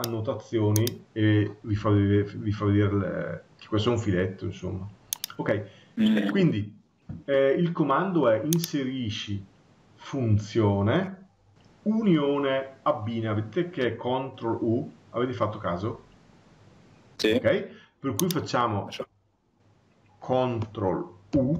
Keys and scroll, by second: 21.1 ctrl+u.